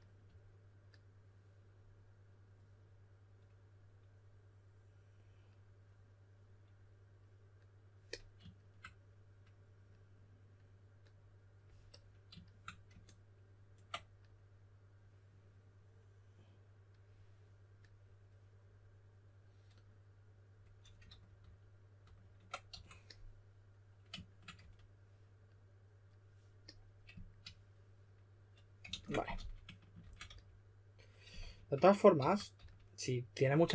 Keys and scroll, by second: 21.0 super+z, 21.3 super+z, 22.0 super+z, 22.7 q, 24.5 e, 28.8 super+a, 29.3-33.0 typing.